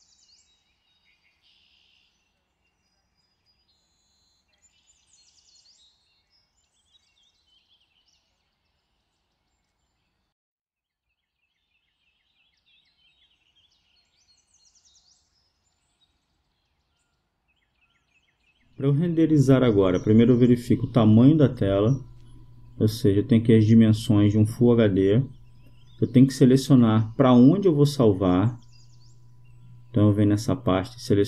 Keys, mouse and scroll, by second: 5.7-8.9 drag.